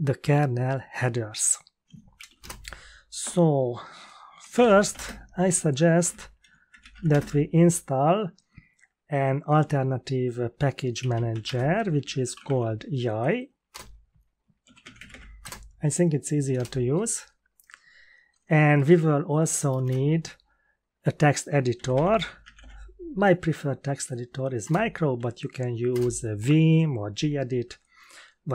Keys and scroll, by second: 1.9-2.7 typing, 4.1-7.8 typing, 11.0-12.9 typing, 13.7 Return, 14.4-15.5 typing, 16.5 Return, 18.7 Up, 19.4-20.3 typing, 21.5-23.0 typing, 24.6 Return, 25.9 Return.